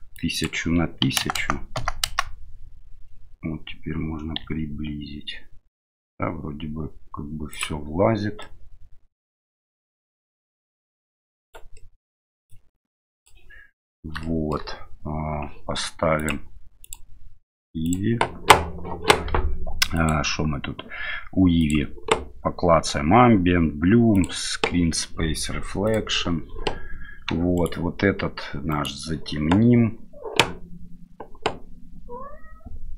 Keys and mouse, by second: 0.1-2.5 drag, 1.3 KP_0, 4.4 s, 8.5-9.3 middle drag, 10.1 middle click, 11.4 right click, 11.9 middle click, 12.5-13.3 drag, 14.2 shift+middle drag, 16.2 click, 16.9-18.0 drag, 20.0 click, 21.6 click, 24.1 click, 27.6 right click, 28.7 right click.